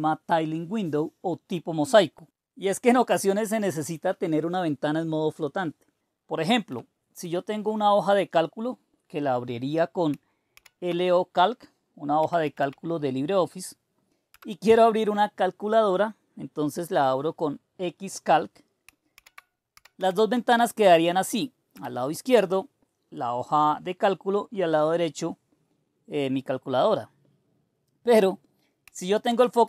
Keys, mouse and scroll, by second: 4.5-6.7 drag, 6.7 Escape, 7.2 Escape, 8.2-10.5 drag, 10.5 super+d, 11.9-13.1 typing, 14.3 Return, 19.1 super+d, 19.5-20.6 typing, 21.7 Return, 29.2 super+Right.